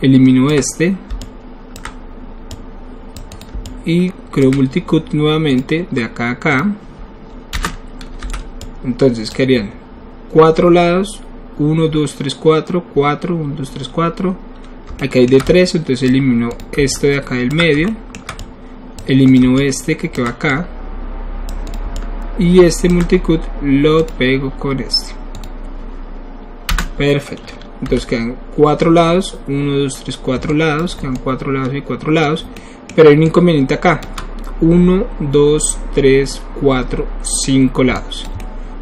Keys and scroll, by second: 7.6 Return, 8.2 w, 9.3 w, 26.7 Return, 27.8 w.